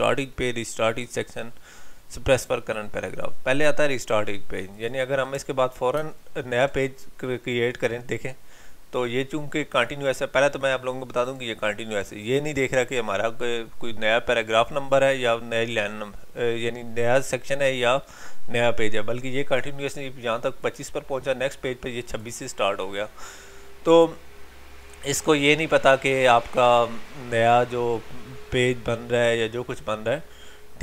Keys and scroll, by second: 6.0 ctrl+Return.